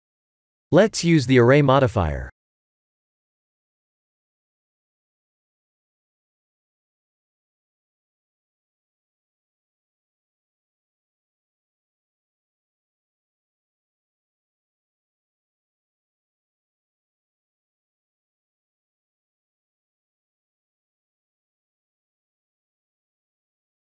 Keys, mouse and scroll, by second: 0.7 middle click, 1.0 middle click, 1.2 middle click, 1.4 middle click, 2.4 click, 7.3 shift+click, 11.8 click, 13.4 click, 16.4 click, 17.5 click, 17.9 click, 18.1 click, 18.4 click, 18.8 click, 18.9 click, 19.3 click, 19.6 click, 20.0 click, 20.9 click, 23.6 KP_3.